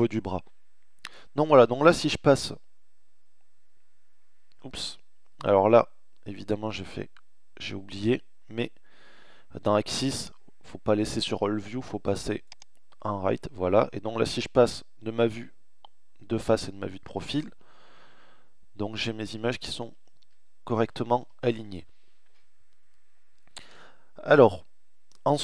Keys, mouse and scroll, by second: 1.2 KP_1, 5.7 KP_3, 6.5 KP_3, 9.1 click, 9.9 click, 10.7-11.1 drag, 12.5 middle click, 12.6 KP_1, 13.3 middle click, 13.3 KP_3, 14.2 KP_1, 15.5 KP_3, 15.9 KP_1, 16.6 KP_3, 18.1-20.1 typing.